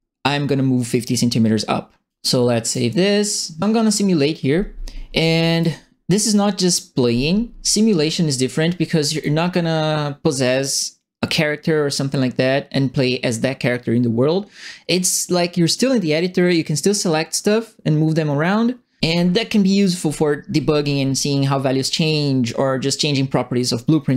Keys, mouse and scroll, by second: 2.6 click, 5.5 click, 9.1 click.